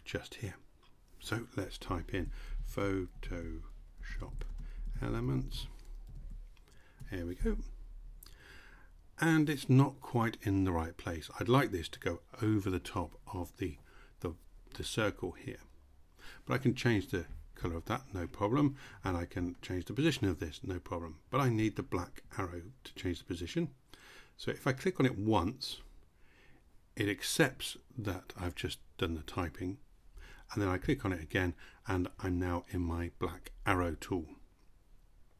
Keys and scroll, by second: 1.5-6.3 typing.